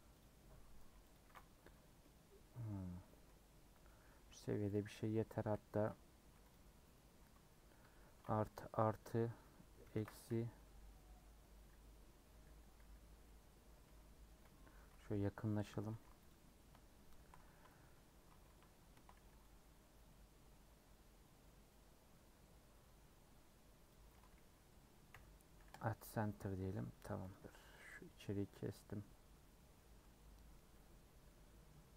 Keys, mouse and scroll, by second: 1.2 ctrl+a, 1.6 Tab, 2.0-3.2 middle drag, 3.2 scroll up 2, 3.9 middle click, 4.1 1, 4.7 click, 5.3 scroll down 1, 5.4 c, 7.7 ctrl+KP_Add, 8.0 ctrl+KP_Add, 9.8 ctrl+KP_Subtract, 12.3 /, 13.1 /, 14.2 KP_Decimal, 14.7-15.9 middle drag, 15.9 2, 16.2 alt+click, 18.4 i, 19.4 c, 25.8 m, 26.4 middle click, 26.8 2, 27.9-30.5 middle drag, 30.5 scroll down 2, 30.7-31.9 middle drag.